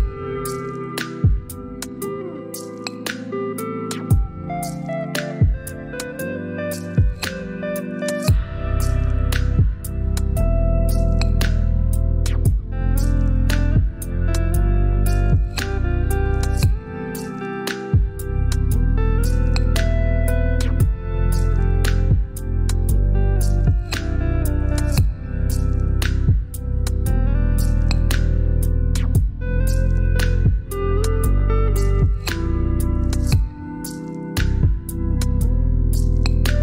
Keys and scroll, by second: 5.4 shift+Down, 6.5 Up, 6.7 Up, 11.0 typing, 13.7 typing, 14.3 ctrl+BackSpace, 20.0 ctrl+j, 22.6 shift+Down, 26.3 typing, 28.6 typing, 29.6 ctrl+BackSpace, 34.1 ctrl+j.